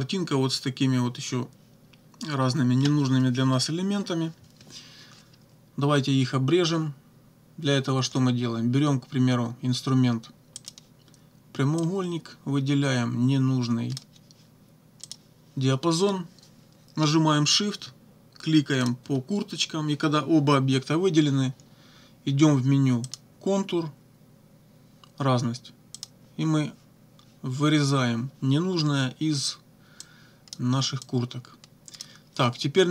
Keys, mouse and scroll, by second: 10.6 click, 11.8-14.2 drag, 15.1 click, 18.8 shift+click, 23.1 click, 26.0 click, 30.0 click, 31.0-32.2 drag.